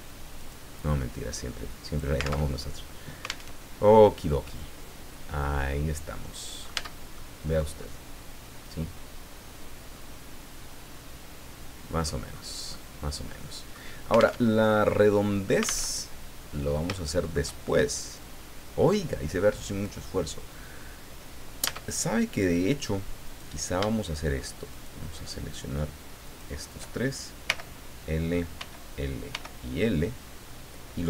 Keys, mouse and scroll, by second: 0.4 right click, 1.1-2.2 drag, 2.4 alt+Tab, 3.5 alt+Tab, 3.8-4.1 scroll down 2, 4.4-6.9 middle drag, 6.8 Tab, 7.2-12.2 middle drag, 12.3 scroll up 2, 12.7-13.9 middle drag, 14.4 alt+Tab, 15.9 alt+Tab, 16.4 scroll down 2, 16.9 shift+middle click, 21.7 Tab, 23.2 right click, 24.7 shift+right click, 26.2 shift+right click, 27.5 l, 28.6 l, 29.3 l.